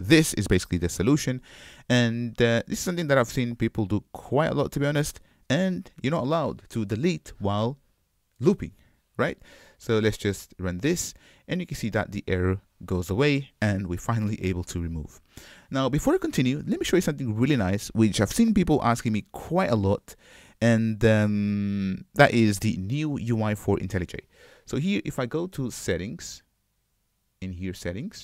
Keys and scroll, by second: 0.9 super+y, 10.8 ctrl+shift+F10.